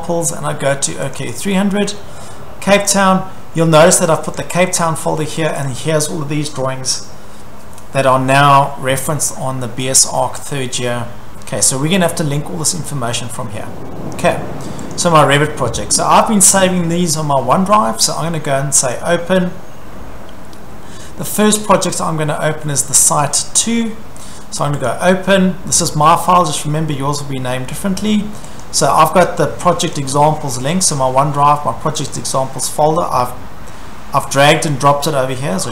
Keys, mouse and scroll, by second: 1.2 click, 1.3 click, 2.9 click, 3.0 click, 4.2 click, 4.4 click, 5.5 click, 5.6 click, 14.9 click, 18.9 click, 23.2 click, 24.9 click, 26.2-26.9 scroll, 28.6 click, 29.9 click, 32.1 click.